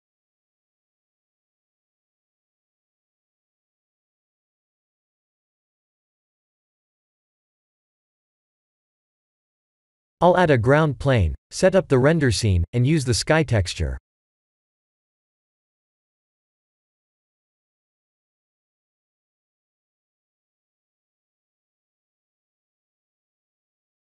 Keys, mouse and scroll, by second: 1.4 click, 2.9 click, 4.7 click, 5.1 middle click, 7.2 middle click, 10.9 click, 11.4 click, 12.0-12.7 scroll down 5, 12.5 click, 12.7 shift+a, 15.4 s, 18.8 s, 20.8 middle click, 22.5 scroll up 2, 22.7 shift+middle click, 23.0 middle click.